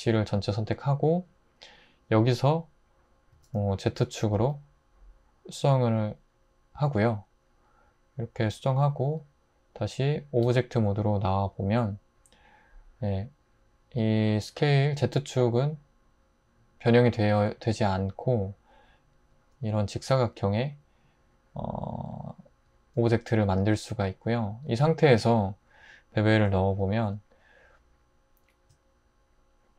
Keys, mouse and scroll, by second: 3.3 s, 3.9 z, 10.4 Tab, 24.7 Tab, 25.2 2, 26.3 super+b.